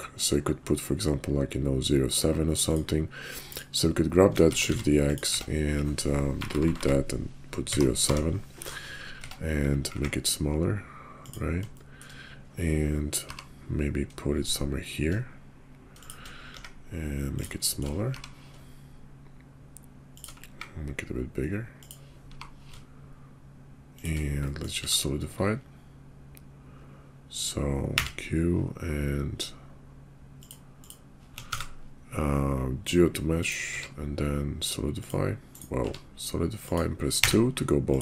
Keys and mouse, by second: 3.4 click, 4.4 shift+d, 5.4 Tab, 6.3-7.9 typing, 9.2 Tab, 9.8 s, 11.9 shift+click, 13.2 g, 16.5 s, 17.6 shift+click, 18.0 g, 20.4 s, 22.2 g, 24.6 click, 24.8 q, 27.9 q, 30.4 click, 31.5 ctrl+a, 33.7 q, 35.7 q.